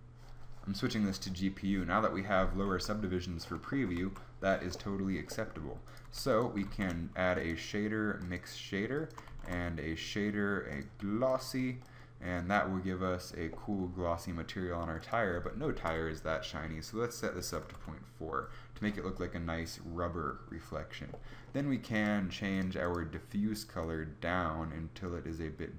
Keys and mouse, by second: 2.6 z, 3.9 z, 6.0 g, 6.6 shift+a, 9.4 shift+a.